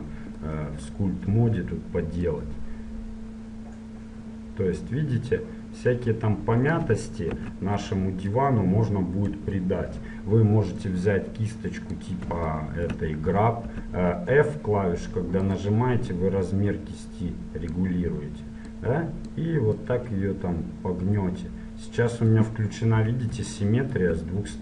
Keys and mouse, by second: 0.0 click, 2.4-4.2 drag, 7.4 ctrl+z, 9.4 KP_1, 10.9-12.8 drag, 13.9 f, 15.7-18.0 drag, 18.8 click, 23.6 click.